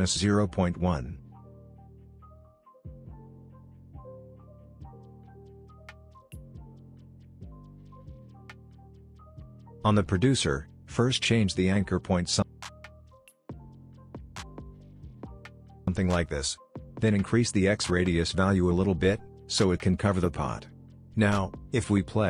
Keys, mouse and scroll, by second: 2.7 Return, 4.1-6.3 drag, 6.6-8.4 scroll up 1, 9.5-11.3 drag, 11.9 ctrl+z, 12.4-16.1 drag, 21.8-22.1 drag, 22.0 space.